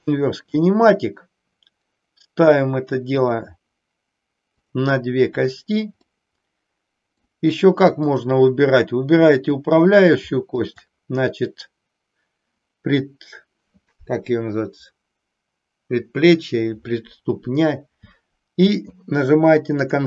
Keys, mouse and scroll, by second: 3.2 click, 4.6 click, 6.2-7.4 middle drag, 10.5-12.0 shift+drag, 19.8-20.0 drag.